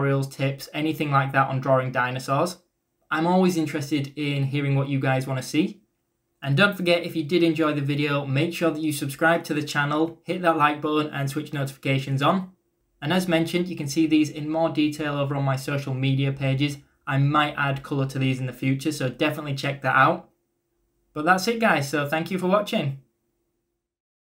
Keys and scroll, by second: 0.0-2.0 typing.